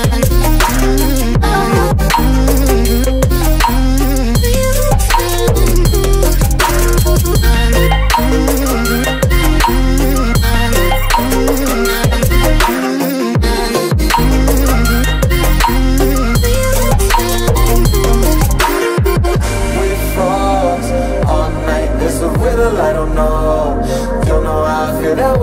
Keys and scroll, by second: 9.9 Left, 17.5 ctrl+z.